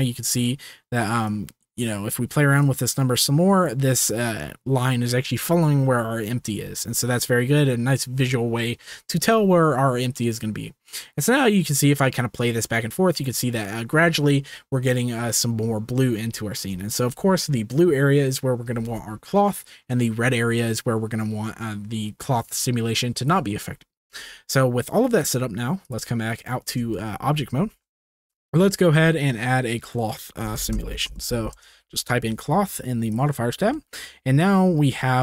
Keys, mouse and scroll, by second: 1.2 click, 2.6-3.7 drag, 10.3-11.6 drag, 12.3 click, 25.8-26.4 drag, 26.9-27.2 shift+middle drag, 27.7 ctrl+s, 29.8-31.6 drag, 33.1 click.